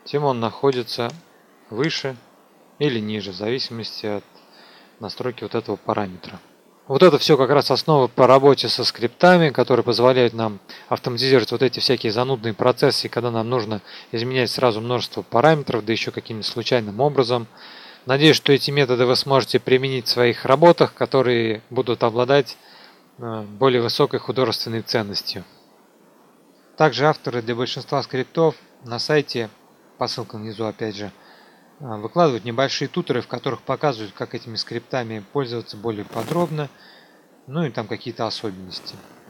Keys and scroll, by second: 26.3 F2.